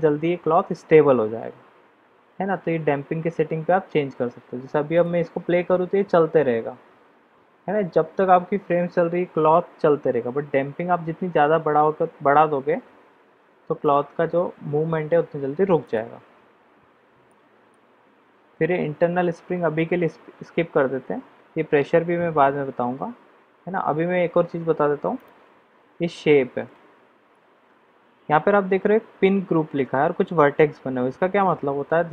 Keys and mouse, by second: 4.9 click, 15.8 click, 17.3 middle click, 25.1 click.